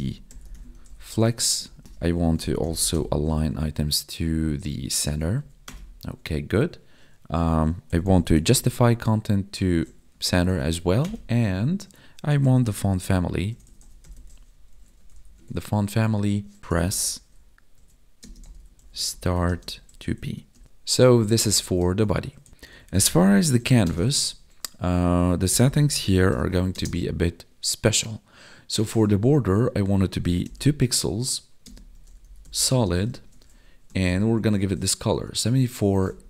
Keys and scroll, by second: 1.3 ctrl+s, 1.6 ctrl+Left, 3.5 Tab, 4.5 Down, 4.7 Tab, 5.1 ctrl+s, 5.3 Right, 8.8 Tab, 10.0 Tab, 10.5 ctrl+s, 10.7 Right, 15.3 Tab, 18.2 space, 19.4 space, 21.9 ctrl+s, 22.5 ctrl+s, 24.0 ctrl+s, 26.7 space, 31.6 space, 32.6 space.